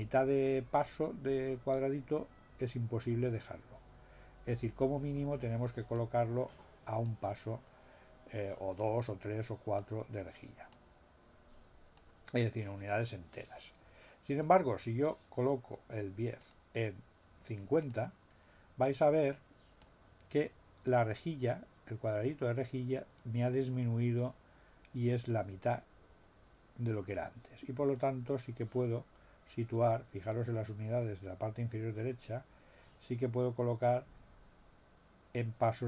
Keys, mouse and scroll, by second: 5.9-7.2 drag, 8.7 click, 10.7-12.1 drag, 16.3 click, 17.8 click, 19.8-35.8 drag.